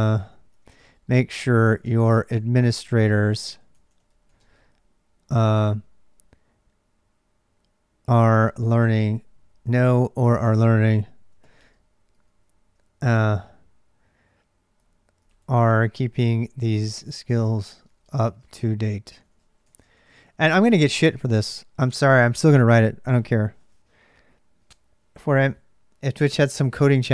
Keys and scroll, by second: 0.0-27.1 typing.